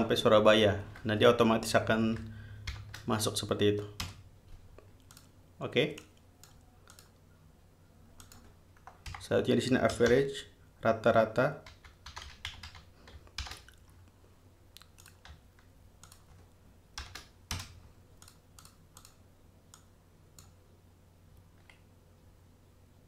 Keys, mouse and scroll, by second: 0.0 shift+click, 2.9 shift+0, 4.2 Return, 5.3 click, 6.2 click, 7.1 click, 8.4 click, 9.3-13.6 typing, 15.2 click, 16.3 shift+click, 17.2 shift+0, 17.7 shift+Return, 18.4 click, 18.8 click, 19.2 click, 20.0 click.